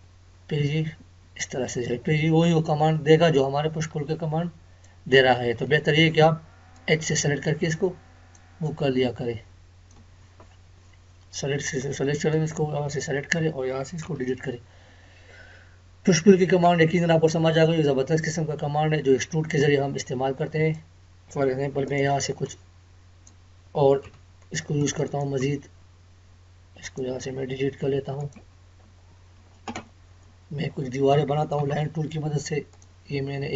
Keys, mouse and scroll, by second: 5.5 Escape, 6.8-10.1 drag, 10.1 Escape, 11.6-14.0 drag, 14.0 Delete, 17.9 scroll down 1, 19.6-24.0 drag, 24.0 Delete, 24.8 click, 25.4 Delete, 28.2 click, 28.3 Delete, 28.8-29.1 scroll up 1, 32.7 click.